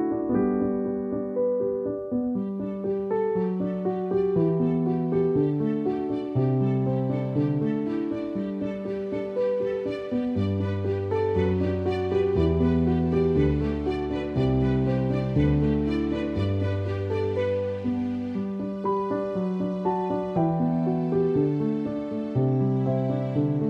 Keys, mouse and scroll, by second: 1.1 space, 1.3 click, 1.4 space, 2.2 click, 3.3 alt+click, 4.2 ctrl+=, 4.6 space, 5.7-6.1 typing, 6.4 ctrl+=, 7.8 alt+click, 9.1 space, 9.2 click, 9.4 space, 10.2 alt+click, 12.6 space, 12.7 click, 12.8 click, 12.9 space, 13.3 alt+click, 14.2 alt+click, 15.1-16.4 typing, 15.3 click, 17.0 click, 17.8 alt+click, 18.8 alt+click, 19.8 alt+click, 20.6 alt+click, 21.6 ctrl+-.